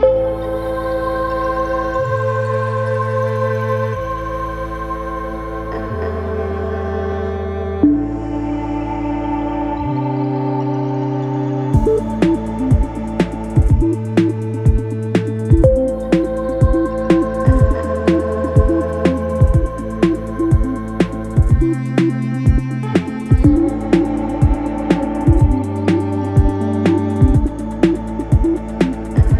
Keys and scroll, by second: 0.3 4, 6.9 5, 7.3 5, 13.2 4, 17.1 F9, 19.2 3, 27.2 4.